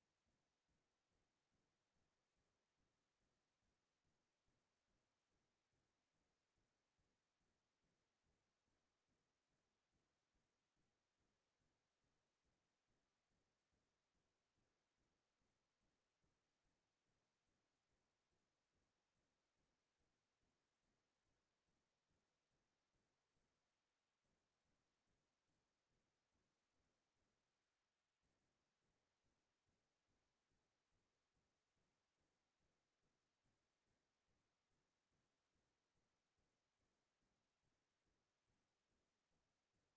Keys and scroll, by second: 3.1 n, 5.8-9.2 typing, 17.8-20.0 typing, 21.1 l, 21.5 h, 21.5 o, 22.0 Return, 39.1 ctrl+v.